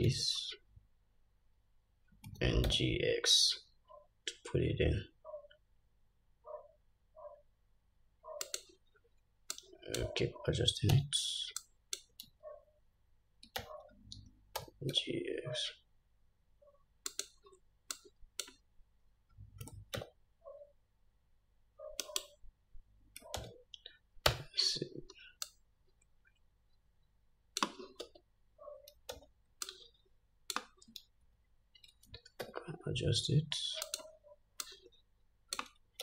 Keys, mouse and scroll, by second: 0.3 alt+z, 2.5 g, 9.8-17.4 drag, 11.1 alt+z, 12.4 alt+z, 13.8 alt+z, 14.8 g, 18.1-34.2 drag, 19.8 g, 23.6 alt+z, 24.5 Tab, 28.2 Tab, 29.3 alt+z, 31.5 alt+z, 32.6 s, 34.8-36.0 drag.